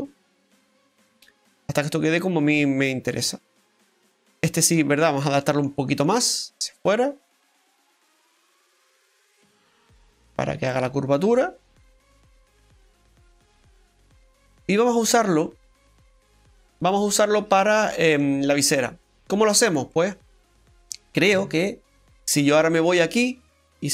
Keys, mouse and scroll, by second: 0.7 middle click, 4.4 right click, 5.1 shift+right click, 5.4 middle click, 6.3 click, 10.7 middle click, 15.4 right click, 16.4 click, 17.3-17.7 scroll down 2, 17.7 middle click, 21.3 Tab, 23.6 right click.